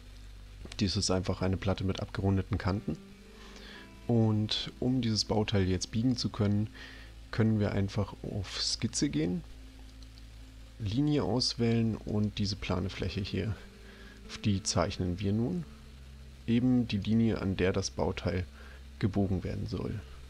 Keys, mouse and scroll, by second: 8.4 click, 9.9 click, 12.1 click.